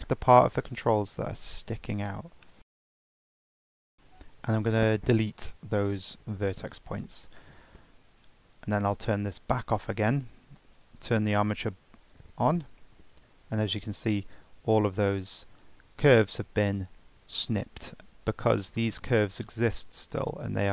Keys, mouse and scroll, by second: 0.4 shift+click, 2.6 shift+click, 2.9 shift+click, 3.2 shift+click, 3.7 shift+click, 3.8 ctrl+click, 5.6 Delete, 7.6 Tab, 10.0 click, 11.0 click, 12.3 click, 14.5 click, 18.1-19.7 scroll up 1, 19.7 click.